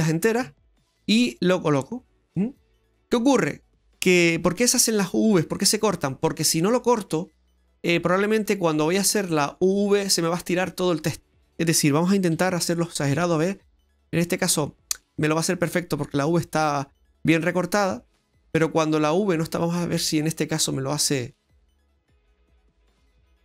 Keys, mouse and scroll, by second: 2.4-2.7 scroll down 2, 2.7 middle click, 12.3 g, 19.4-20.0 scroll down 4, 20.0 middle click, 20.6 right click, 21.0 g.